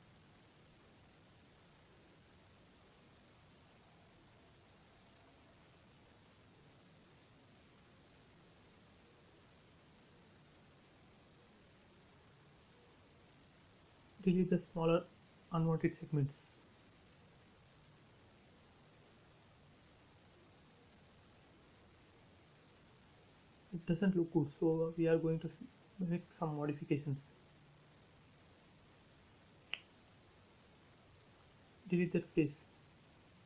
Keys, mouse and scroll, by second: 0.9 l, 1.9 click, 2.6 space, 2.7 scroll up 1, 3.0 e, 3.2 click, 3.8 space, 4.0 scroll down 1, 6.7 scroll up 1, 8.2 click, 9.6-10.0 scroll up 1, 10.5 e, 10.9 click, 12.2 space, 12.4 click, 13.1 scroll up 1, 13.6 e, 14.2-16.4 drag, 16.4 space, 16.5 scroll down 1, 17.6 scroll down 1, 18.2 shift+middle click, 19.2 click, 19.5 scroll down 1, 21.1 shift+middle click, 21.8 scroll up 1, 23.2 l, 24.1-24.5 scroll up 1, 25.3 click, 25.9 space, 26.2-27.0 scroll up 1, 27.1 l, 27.9 click, 29.1 space, 30.0 click, 30.6 shift+click.